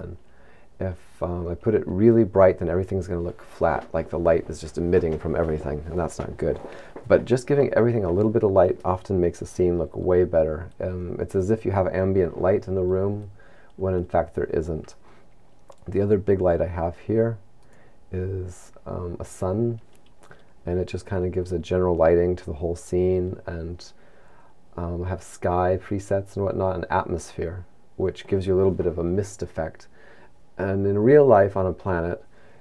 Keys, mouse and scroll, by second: 18.2 right click.